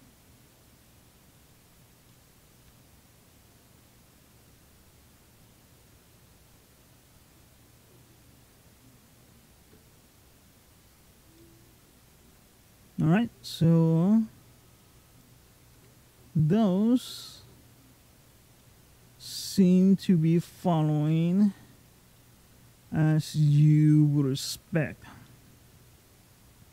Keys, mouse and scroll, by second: 1.9 middle click, 2.5 g, 11.2 middle click, 12.4-12.8 scroll down 2, 12.7-13.1 scroll up 2, 13.1 scroll down 1, 14.0 scroll down 2, 14.9 click, 15.6 g, 18.4 middle click, 19.6 click, 20.2 g, 22.0 middle click, 22.6-23.0 scroll down 2, 23.0 scroll up 2, 23.2 scroll down 1, 23.4 middle click, 24.5-25.1 scroll up 3, 25.1 middle click, 26.3-26.7 scroll down 5.